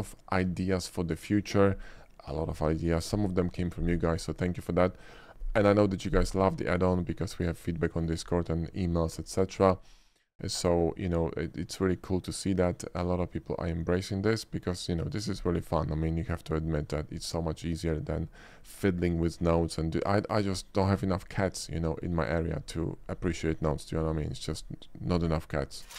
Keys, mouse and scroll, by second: 12.8 shift+middle drag, 13.4-14.7 shift+middle drag.